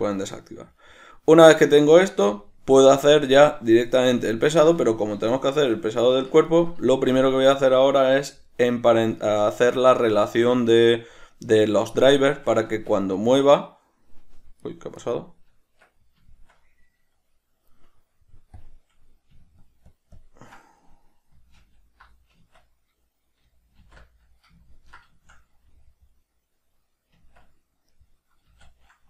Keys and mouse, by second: 12.8 Tab, 13.2 right click, 14.7 right click, 15.1 right click, 15.6 Tab, 18.7 click, 19.8 shift+click, 20.1 shift+click, 20.3 shift+click, 21.7 alt+h, 24.8-29.0 ctrl+middle drag, 27.3 Tab, 28.6 a.